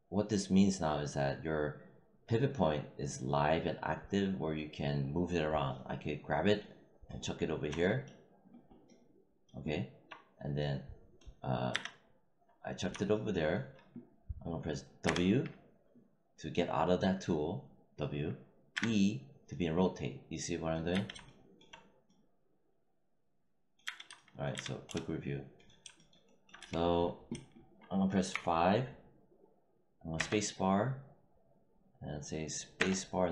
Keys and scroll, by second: 11.6 z, 15.0 w, 18.7 e, 20.8 z, 23.7 z, 24.4 z, 26.5 w, 28.2 5, 30.1 space, 32.7 space.